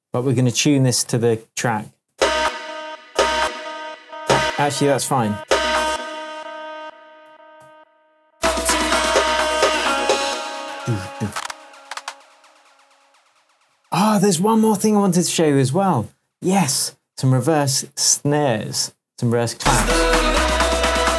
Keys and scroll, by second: 0.5 BackSpace, 2.1 space, 3.4 space, 4.2 space, 4.7 shift+Tab, 5.4 shift+space, 7.3 super+d, 10.2 space.